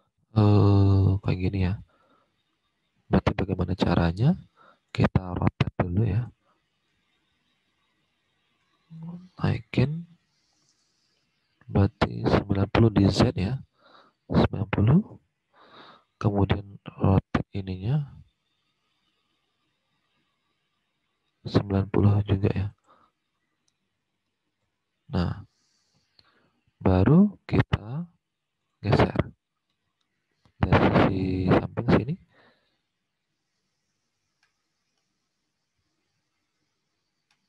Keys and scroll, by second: 1.6 alt+Tab, 14.0-14.9 typing, 15.0 Return, 23.8 typing, 24.6 Return.